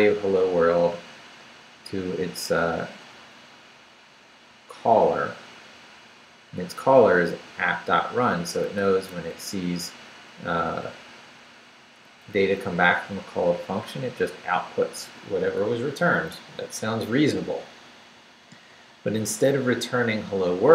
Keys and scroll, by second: 5.6 Down, 6.8 Left, 7.7 Right, 8.8 Left, 9.1 Up, 10.6 Down, 12.0 Up.